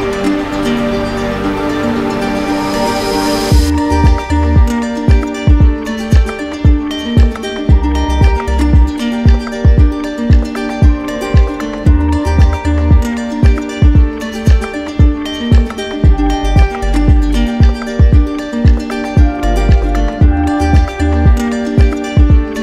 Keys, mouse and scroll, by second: 0.4 click, 1.5 right click, 3.4 right click, 4.0 right click, 5.3 right click, 6.4 right click, 8.1 click, 9.0 click, 9.6 right click, 10.6 click, 11.5 click, 12.1 right click, 13.5 click, 14.7 click, 15.3 click, 15.9 right click, 17.2 click, 17.4 ctrl+z, 18.6 z, 19.8 click, 22.0 click.